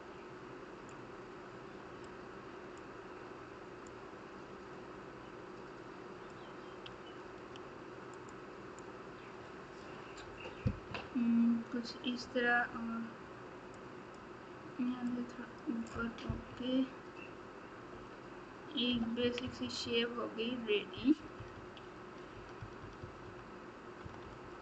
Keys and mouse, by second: 2.0 click, 3.8-6.3 drag, 7.2 f, 8.8-9.8 drag, 10.9 KP_1, 13.7 click, 15.0 click, 16.5 KP_7, 17.9 KP_1, 18.9 KP_8, 19.2 KP_6, 20.9 KP_4, 24.0 KP_Subtract.